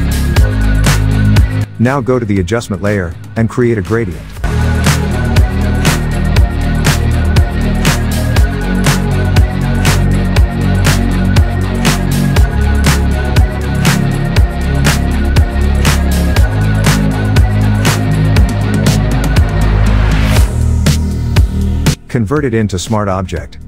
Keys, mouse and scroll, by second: 1.1 Delete, 1.6 click, 3.2 click, 5.0-8.1 drag, 13.4 Tab, 14.5 click, 16.3 click, 20.4 right click, 21.5 click.